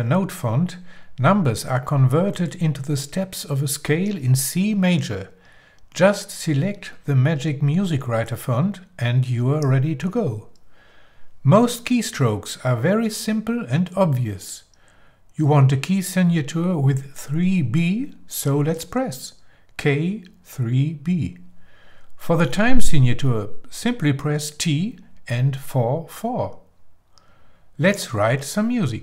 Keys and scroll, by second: 0.0-1.3 typing, 8.6-9.9 typing, 12.1 Page_Up, 19.8 shift+k, 21.9 3, 22.6 b, 25.7 shift+t, 26.5 shift+4, 27.0 4.